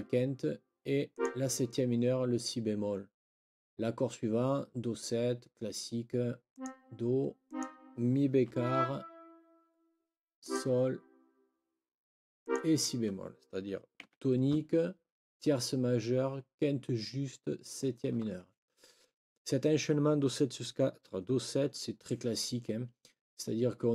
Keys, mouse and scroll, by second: 1.1 click, 6.5 click, 7.5 click, 8.5 Up, 10.4 click, 12.4 click, 14.0 Escape.